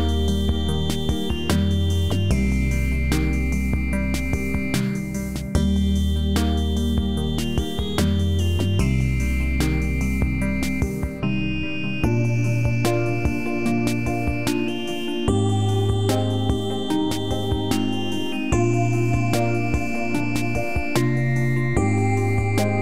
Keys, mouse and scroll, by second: 0.4-0.7 alt+middle drag, 1.5-4.9 drag, 8.9 scroll down 1, 10.1 alt+middle click, 10.1 alt+middle click, 10.5-10.9 scroll down 1, 11.3 alt+middle drag, 12.5-12.8 drag, 18.6 click.